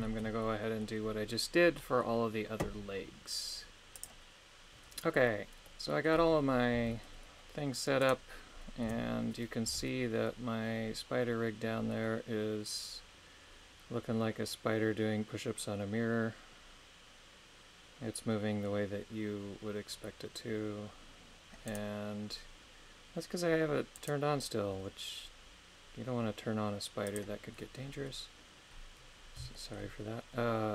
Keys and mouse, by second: 0.0 shift+middle click, 0.4 middle click, 1.8 middle click, 5.7-6.8 middle drag, 6.8 g, 8.9 KP_3, 9.7 g, 24.0 right click, 27.0 click, 29.5 shift+middle click.